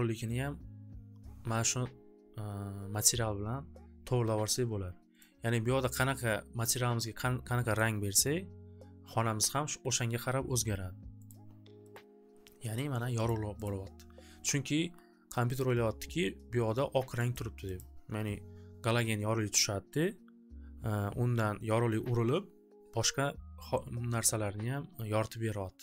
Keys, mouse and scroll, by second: 2.3-3.6 drag, 5.3 click, 6.1 click, 7.7 click, 8.3 click, 11.2 click, 11.9 click, 13.2 click, 13.7 click, 15.5 click, 17.3 click, 17.7 click.